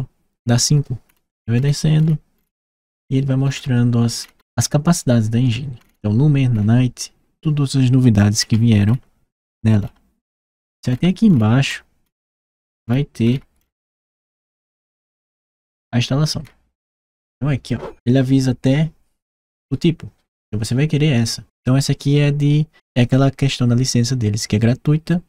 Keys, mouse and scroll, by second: 0.8 middle click, 0.9-3.3 scroll down 3, 3.3-4.0 scroll down 1, 4.0-5.6 scroll down 1, 5.6-9.5 scroll down 1, 14.3-16.2 scroll down 3, 16.2 scroll up 1.